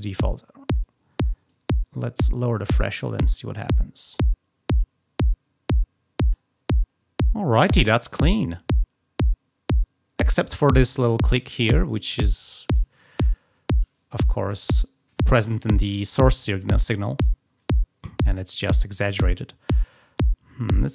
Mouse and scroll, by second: 1.4-6.3 drag.